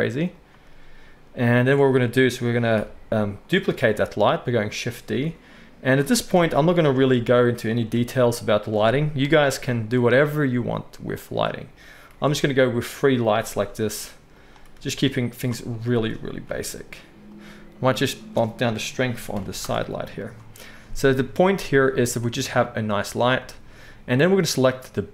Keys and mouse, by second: 2.7 KP_1, 3.9 shift+d, 5.2 r, 6.3 KP_7, 7.1 r, 7.9 g, 9.2 KP_0, 12.1 shift+click, 12.1 shift+d, 12.4 right click, 12.5-14.0 drag, 13.6 r, 14.0-18.2 right drag, 14.7 r, 16.4 g, 18.2-24.8 middle drag, 20.5 click, 20.5 right click, 21.4 click, 21.4 right click, 24.8-25.1 right drag.